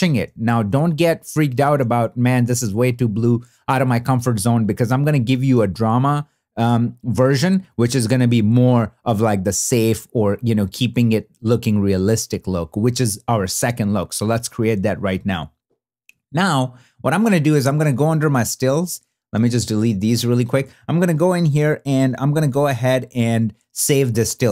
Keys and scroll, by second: 1.3 shift+d, 19.7 shift+BackSpace.